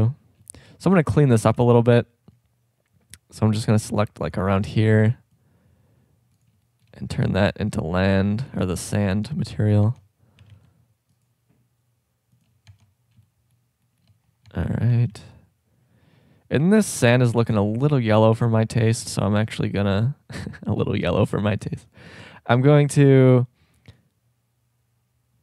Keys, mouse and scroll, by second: 0.4 shift+scroll up 1, 1.6 a, 1.8 c, 4.8 c, 8.6 Tab, 9.8 Tab, 10.4 a, 10.5 c, 12.4 click, 12.7 Tab, 13.3 click, 14.5 Tab, 14.9 a, 15.1 c, 23.0-25.4 drag.